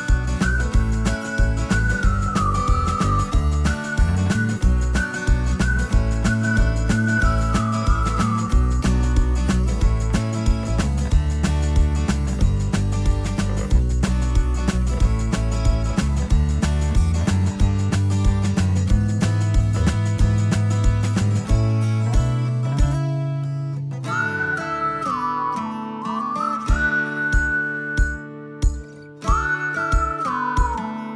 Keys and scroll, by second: 6.4-11.2 typing.